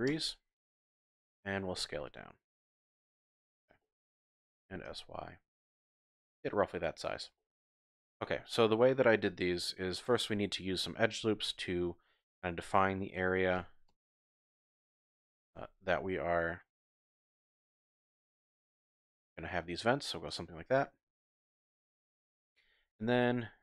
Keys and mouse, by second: 0.1 KP_Enter, 1.8 s, 3.1 click, 3.8 shift+click, 4.6 s, 4.9 y, 6.3 click, 7.4 shift+click, 11.3 ctrl+r, 12.3 click, 13.6 s, 13.9 x, 14.7 click, 15.3 s, 15.5 y, 20.3 click, 22.8 ctrl+r.